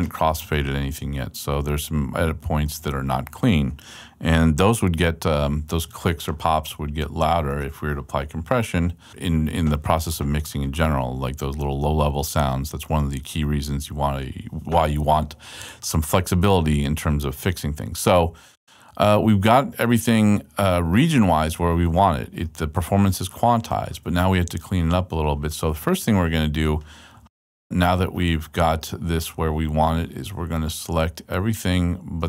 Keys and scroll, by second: 10.1 super+Left.